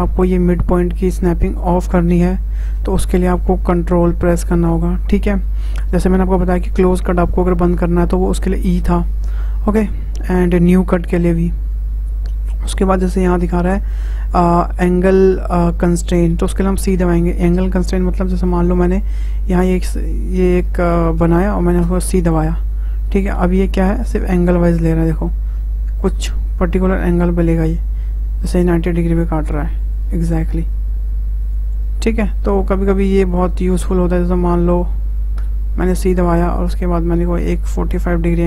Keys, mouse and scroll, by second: 17.9-18.3 scroll up 1, 18.3-21.4 shift+middle drag.